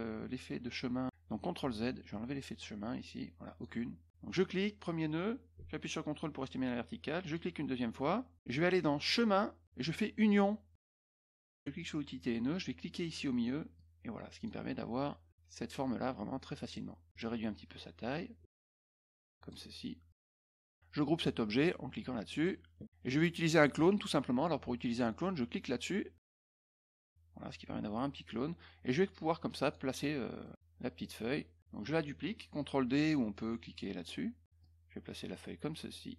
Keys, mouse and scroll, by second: 1.6 ctrl+z, 2.6-3.6 drag, 4.2 click, 7.2 ctrl+click, 9.0 click, 10.7 click, 11.7 click, 13.7 click, 15.3-16.7 drag, 17.1 click, 18.4-19.4 ctrl+drag, 20.1 click, 22.3 click, 26.1 click, 26.9-29.7 drag, 30.4 middle click, 31.0 middle click, 34.6-36.1 drag.